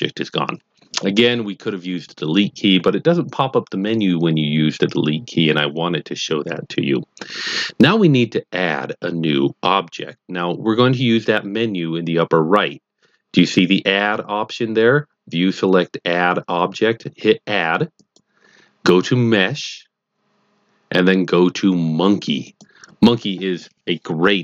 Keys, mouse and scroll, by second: 18.0 click, 22.5 click.